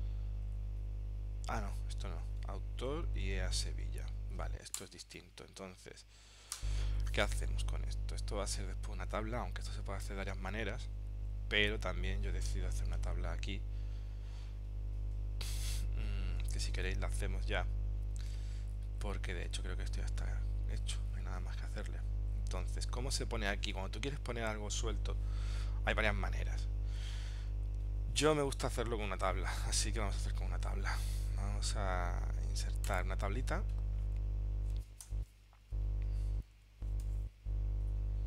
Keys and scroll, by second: 3.3 super+Tab, 7.5 super+Tab, 16.9 super+Tab, 20.2 super+Tab, 29.7 super+Tab.